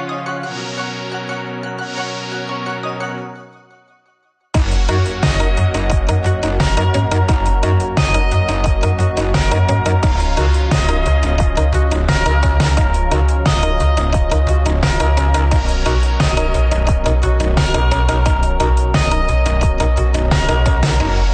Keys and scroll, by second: 3.0 ctrl+v.